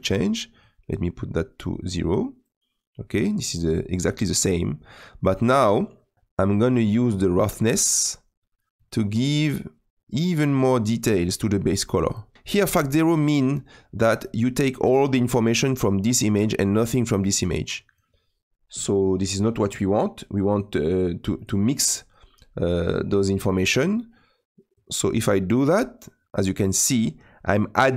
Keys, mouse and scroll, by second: 0.6-2.5 drag, 2.5-8.8 middle drag, 8.8-12.3 drag, 24.9-27.9 drag.